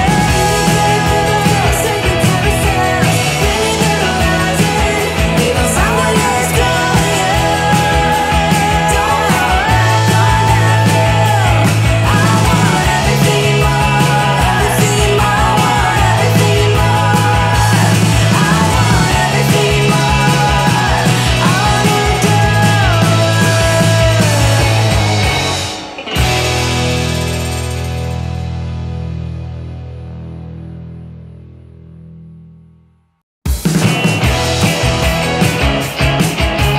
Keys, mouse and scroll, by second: 2.2-2.6 scroll down 1, 3.7-6.6 drag, 7.7-8.2 scroll down 1, 8.2-8.9 middle click, 9.0-9.7 scroll down 1, 10.9-15.1 drag, 15.3 scroll up 1, 16.6 click, 21.0 scroll up 1, 22.6 click, 25.3-26.9 drag.